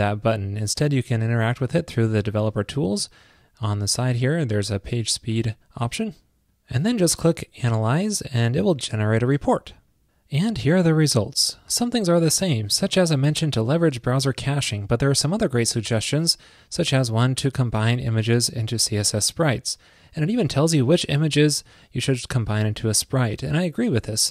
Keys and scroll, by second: 1.5 alt+super+i.